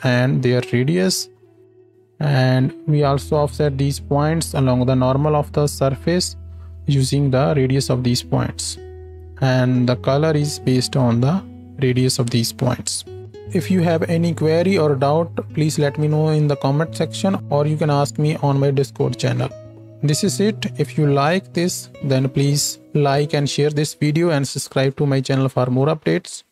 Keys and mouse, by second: 0.1-4.0 drag, 2.3-4.0 middle drag, 2.3-4.0 right drag, 4.7 ctrl+space.